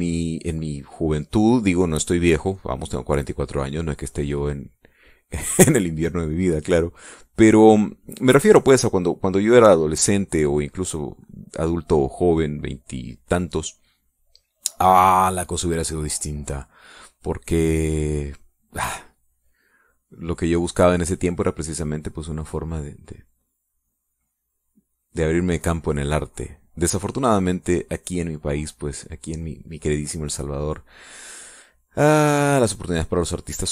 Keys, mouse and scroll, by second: 1.7-10.1 drag, 13.2 middle click, 13.9 middle click, 14.4 click, 15.4 middle click, 15.6 click, 16.2 click, 16.7 middle click, 16.7 click, 17.2 click, 17.3 middle click, 19.9 middle click, 29.5 click, 30.9-33.7 drag.